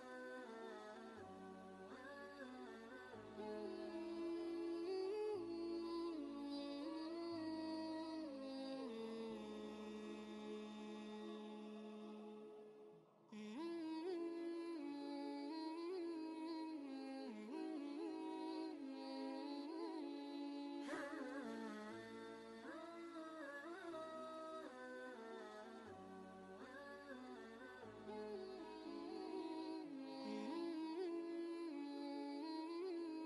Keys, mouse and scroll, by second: 0.9 click, 1.8 ctrl+z, 3.0 click, 5.7 shift+Down, 7.9 click, 7.9 click, 12.9 typing, 14.0-18.6 shift+drag, 23.5 click, 25.8 Down, 28.9 click, 32.5 click.